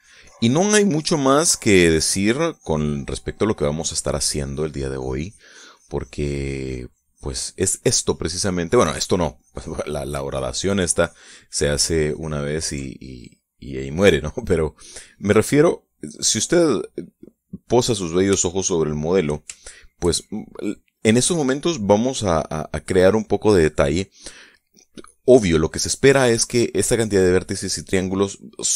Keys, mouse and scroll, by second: 9.2-13.3 ctrl+drag, 13.3-15.1 ctrl+middle drag, 16.1 click, 17.1-18.8 drag, 18.9 shift+click, 20.1 shift+click.